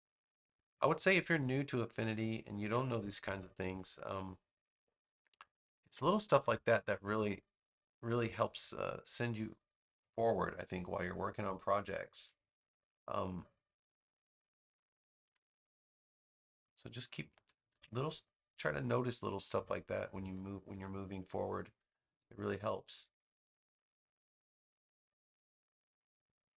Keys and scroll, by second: 2.5 super+x, 5.7 super+v, 14.2 space, 17.6 super+x, 20.6 super+v.